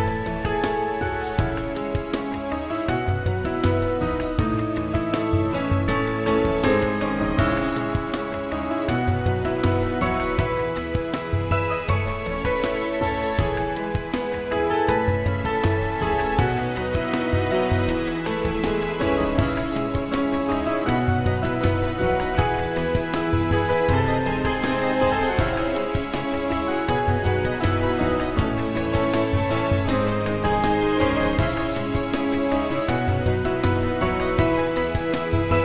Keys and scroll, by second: 1.7 a, 3.1 l, 4.2 ctrl+i, 6.3 a, 7.1 s, 8.9 g, 16.1 a, 16.9 s, 18.8 g, 24.6 Tab.